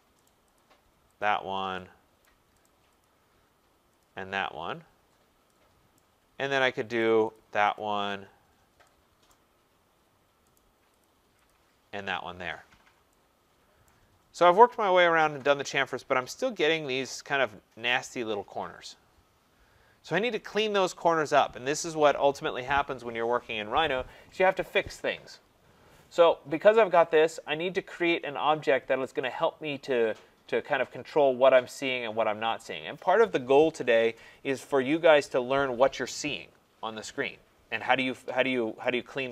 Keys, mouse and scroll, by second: 0.2 right click, 0.5 click, 1.2 click, 2.2 right click, 2.6 right click, 3.0 click, 4.0 click, 4.5 middle click, 4.6 middle click, 5.1 middle click, 5.2 middle click, 5.9 right click, 6.3 scroll, 7.0 right click, 7.3 click, 7.8 click, 9.3 right click, 9.5-10.1 scroll, 10.6 right click, 11.1 click, 11.5 click, 12.7 scroll, 13.9 right click, 14.1-14.6 scroll, 15.8-16.5 scroll, 16.9 scroll.